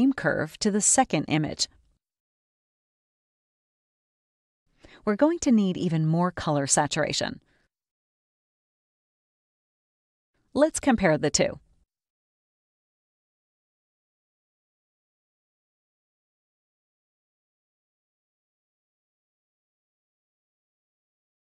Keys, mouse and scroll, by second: 0.7-2.1 drag, 3.0-4.1 drag, 5.7 space, 6.1 click, 8.6 click, 11.0 click, 12.7 scroll up 2, 13.7-15.6 drag, 17.2 click, 18.3 click, 20.2 click, 21.0 click.